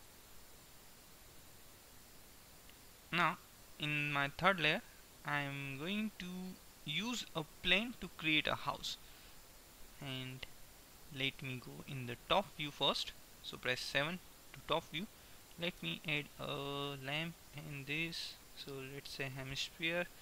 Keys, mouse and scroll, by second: 0.2-4.0 drag, 4.0-6.5 middle drag, 13.7 KP_7, 15.2-16.2 middle drag, 16.2 shift+a, 19.8 middle click.